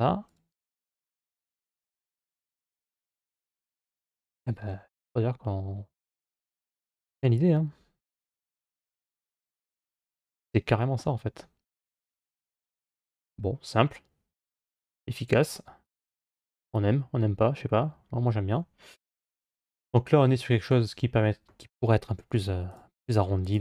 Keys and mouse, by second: 6.4 g, 12.9-18.8 middle drag, 19.8-21.4 middle drag, 22.6 click.